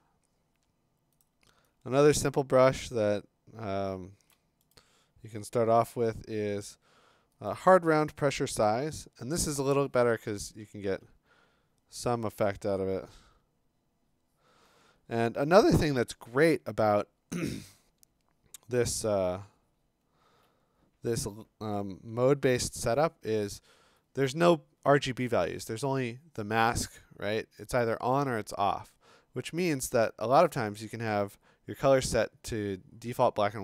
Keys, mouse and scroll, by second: 1.2-2.2 click, 1.9 click, 2.3 click, 2.3-4.3 click, 2.5 click, 2.5 click, 2.6 click, 4.3 click, 4.7 right click, 7.5 click, 7.5 scroll, 8.6 click, 10.9 ], 11.3-12.0 ], 17.5 x, 21.0-21.7 typing, 29.9 d.